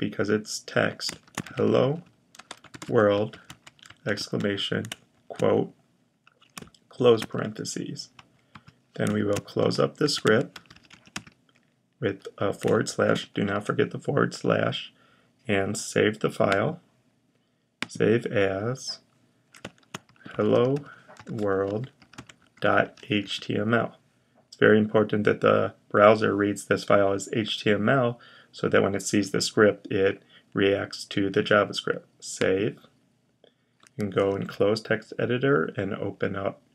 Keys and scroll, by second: 0.8-3.9 typing, 5.0 typing, 6.8 typing, 8.8-11.5 typing, 12.7 typing, 19.6-23.6 typing, 34.1 super+h.